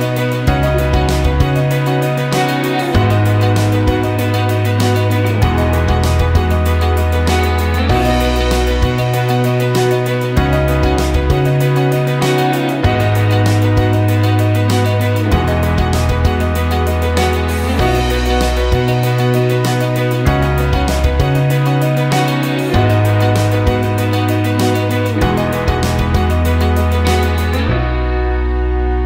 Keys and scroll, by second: 1.7 ctrl+shift+z.